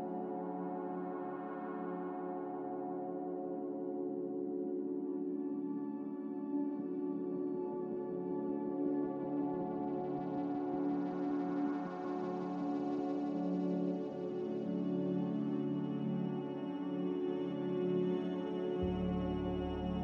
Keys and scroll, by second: 2.3 q, 2.4 ctrl+j.